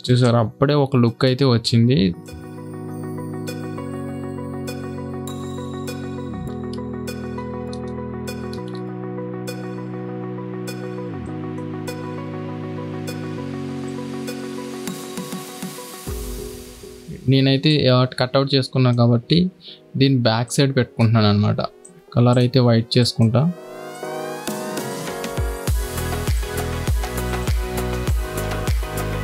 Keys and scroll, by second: 0.0 space, 2.2 alt+Tab, 4.0-9.5 typing, 12.2 alt+Tab.